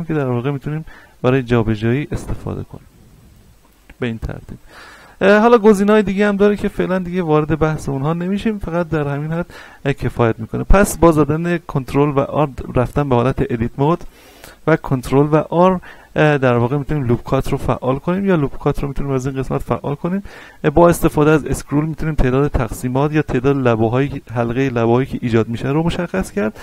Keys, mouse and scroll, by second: 4.6 ctrl+z, 5.2-5.9 scroll down 1, 5.9 scroll down 1, 6.5 Tab, 7.9-10.9 shift+middle drag, 10.9 Tab, 11.4 scroll up 1, 11.8 shift+middle click, 12.1-12.4 shift+scroll up 1, 14.8 ctrl+r, 21.3-22.1 scroll up 1, 22.1-22.8 scroll down 1, 23.6-26.6 scroll up 1.